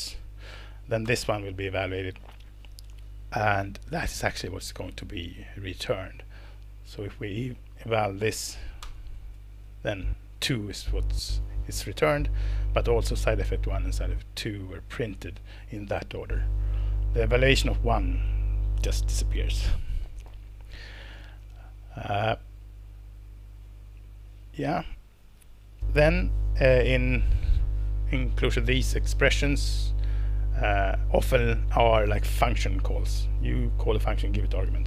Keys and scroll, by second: 0.1 Escape, 0.6 Down, 1.0 ctrl+Return, 4.7 Escape, 8.8 alt+Return.